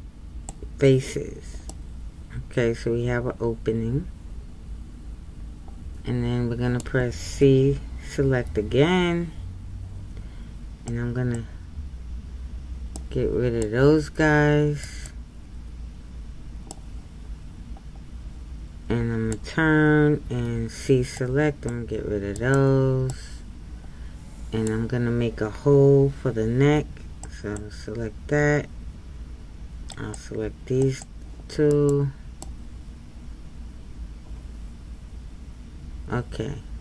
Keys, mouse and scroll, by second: 1.7-4.7 middle drag, 16.7-21.2 middle drag, 21.2 c, 23.1-27.2 middle drag, 27.2 c, 32.4-35.4 middle drag.